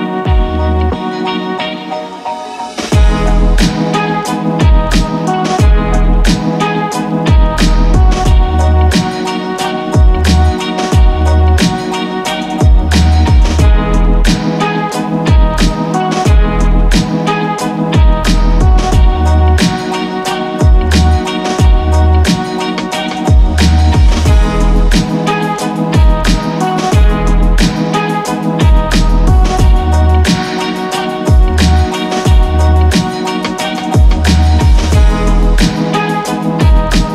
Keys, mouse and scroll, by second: 0.0-0.3 typing, 1.6-3.8 typing, 5.0 right click, 6.8 click, 13.6 right click, 15.7-32.8 drag, 32.8 c, 33.3 c, 33.7-36.0 drag, 36.0 c, 36.8-37.1 drag.